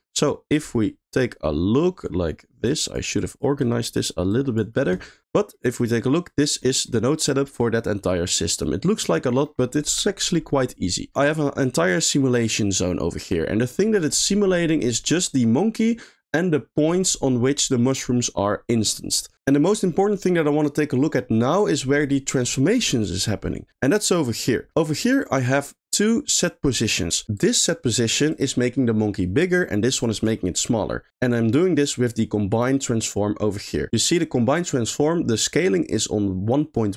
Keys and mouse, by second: 1.1 middle click, 3.2 click, 4.3 click, 5.5 middle click, 6.7 middle click, 7.3 middle click, 8.4 middle click, 9.5 middle click, 12.7 middle click, 13.1 middle click, 19.6 middle click, 21.0 middle click, 21.3 middle click, 23.0 middle click, 23.5 middle click, 24.2 middle click, 24.8 middle click, 25.4 middle click, 26.1 click, 26.8 click, 27.4 click, 28.3 click, 29.6 click, 30.1 click, 32.1 click, 32.3 click, 33.5 middle click.